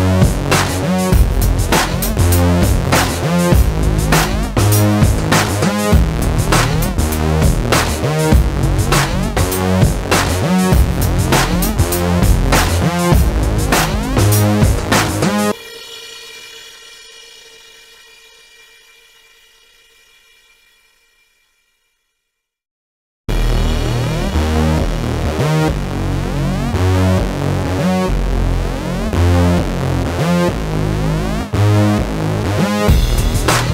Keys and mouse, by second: 0.2 click, 0.7 Tab, 1.0 Tab, 1.3 ctrl+s, 1.9 middle click, 2.1-3.4 middle drag, 3.6 ctrl+b, 5.9 ctrl+KP_Subtract, 6.0 alt+s, 7.2 middle click, 8.7 alt+m, 9.2 middle click, 10.0 alt+m, 10.5 middle click, 10.7 Tab, 11.2 middle click, 12.0 click, 12.2 middle click, 12.3 click, 13.3 ctrl+b, 14.0 ctrl+KP_Subtract, 14.1 alt+s, 14.9 middle click, 17.2 alt+m, 18.2 right click, 18.8 alt+m, 19.2 middle click, 20.5 alt+s, 21.0 KP_7, 21.9 Tab, 22.1 Tab, 22.8 middle click, 23.2 middle click, 23.4 click, 23.6 click, 23.7 middle click, 23.7 click, 23.9 click, 24.1 middle click, 24.2 ctrl+b, 25.4 ctrl+KP_Subtract, 25.6 alt+s, 26.3 middle click, 28.4 alt+m, 29.5 middle click, 29.9 alt+m, 30.3 KP_7, 30.9 middle click, 31.0 click, 31.7 alt+s, 32.2 KP_7, 33.3 ctrl+z.